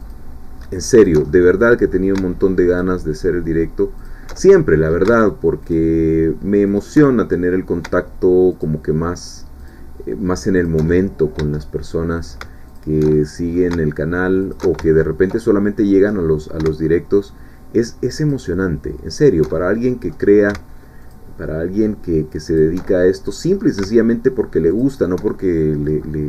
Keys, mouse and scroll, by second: 0.1-1.2 alt+shift+drag, 1.3 alt+shift+middle click, 2.8 alt+shift+click, 4.0 alt+shift+click, 4.4 alt+shift+middle click, 5.6 alt+shift+click, 6.7 alt+shift+click, 7.0 alt+shift+middle click, 8.5 alt+shift+click, 9.6 alt+shift+click, 10.7 alt+shift+click, 10.9 alt+shift+middle click, 11.6 alt+shift+middle click, 12.7 alt+shift+click, 13.1 alt+shift+middle click, 14.4 click, 14.9 ctrl+alt+shift+middle click, 15.8 middle click, 17.2 alt+shift+click, 18.2 alt+shift+click, 19.2 alt+shift+click, 19.5-20.5 alt+shift+middle drag, 21.1 alt+shift+click, 22.6 alt+shift+click, 22.8 alt+shift+middle click, 24.7 alt+shift+click, 25.3 alt+shift+middle click.